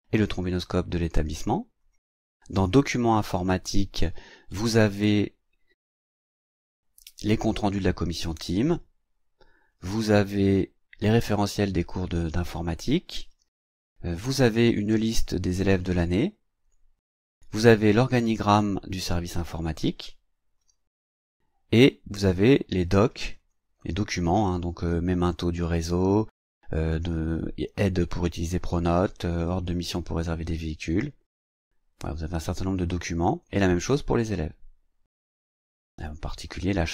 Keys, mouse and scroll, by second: 1.8 click, 2.7 click, 7.3 click, 9.7 click, 11.0 click, 13.3 click, 18.2 click, 20.6 click, 23.2 click, 31.3 click, 33.3 click.